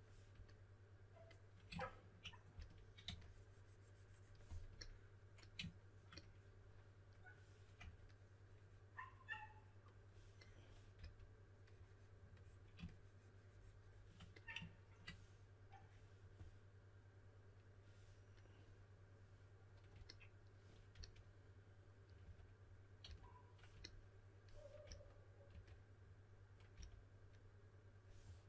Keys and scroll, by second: 2.5-3.5 typing, 7.7 3, 10.7-11.4 typing, 20.9 typing, 22.2-23.0 typing, 24.8-25.5 typing, 26.7 typing.